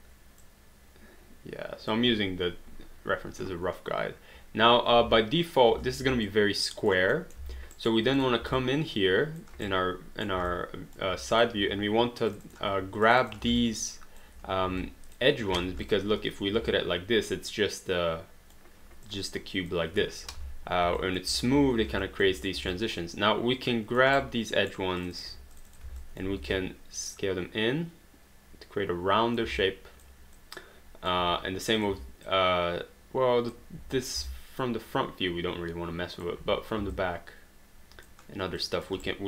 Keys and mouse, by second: 5.0 space, 6.3 alt+click, 7.2 alt+middle click, 7.7 alt+right click, 8.2 click, 8.6 alt+click, 9.7 right click, 10.6 alt+click, 12.3 click, 13.1 shift+click, 13.6 alt+click, 14.8 alt+click, 15.5 alt+d, 16.7 alt+click, 20.4 3, 21.0 alt+click, 21.8 alt+d, 22.1 alt+click, 22.8 alt+click, 24.2 right click, 25.0 click, 25.6 shift+click, 26.0 alt+click, 26.4 r, 27.1 click, 29.6 alt+click, 31.8 click, 32.3 alt+click, 34.8 alt+click, 37.0 alt+click, 38.8 alt+click, 39.0 right click.